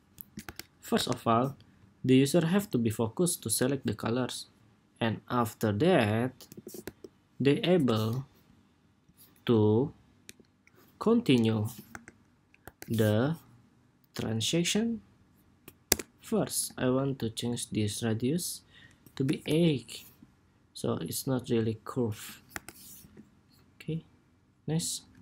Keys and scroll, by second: 0.1 super+-, 0.7 super+=, 2.2 super+s, 12.4 super+=, 22.6 super+-, 22.7 super+s.